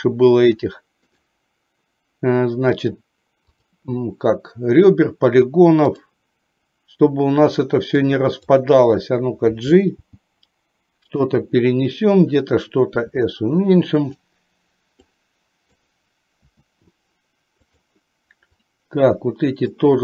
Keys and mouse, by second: 1.2-3.8 right drag, 8.0 click, 10.2 g, 13.0 s, 15.0 click, 16.5 s, 18.6-19.8 drag.